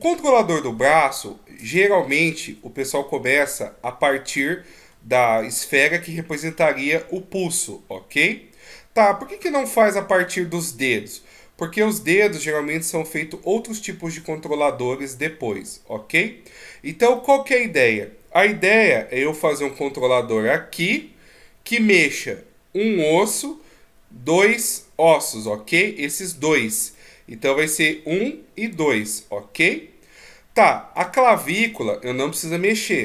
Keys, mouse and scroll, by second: 0.2 scroll down 1, 2.1 right click, 4.3 scroll up 2, 5.5 scroll up 2, 16.1-17.1 scroll down 2, 17.1 middle click, 19.0 d, 19.3 click, 20.9-21.9 d, 21.9 click, 23.2 d, 24.3 click, 24.3 d, 25.5 d, 26.9 middle click, 28.7 d, 28.9 right click, 31.0 d.